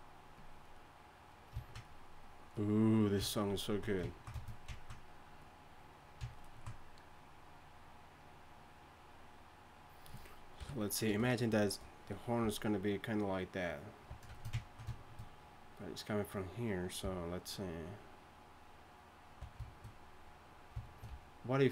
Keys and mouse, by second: 10.6 KP_3, 12.4 d, 13.8-14.3 drag, 14.1 d, 17.0-19.4 d, 21.1 d, 21.6-21.7 d.